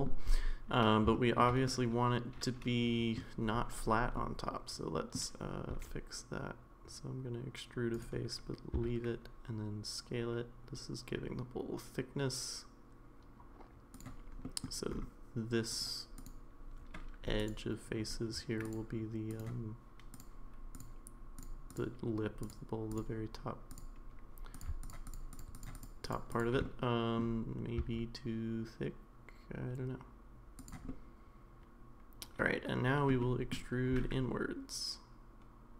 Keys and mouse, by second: 1.1 shift+middle click, 1.7-3.1 middle drag, 4.1-5.2 middle drag, 5.7 e, 14.4 middle click, 16.2 click, 18.7 click, 20.7 click, 21.4 click, 21.7-24.6 drag, 24.8 shift+click, 25.0 shift+click, 25.3 shift+click, 25.5 shift+click, 25.7 shift+click, 26.0 shift+click, 26.3 shift+click, 26.6 middle click, 27.8 s, 30.9-33.1 middle drag, 33.2 middle click, 33.9 e.